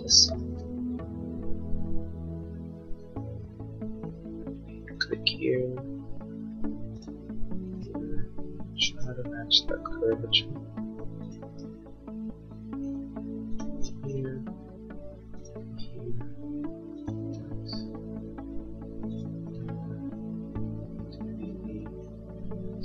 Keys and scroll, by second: 3.1 a.